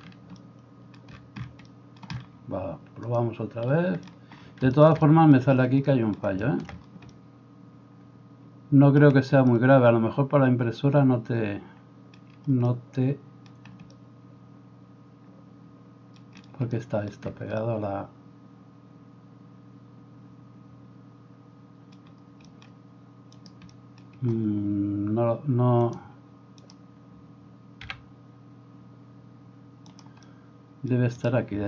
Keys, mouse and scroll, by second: 23.4 middle click, 23.4 right click, 27.8 g.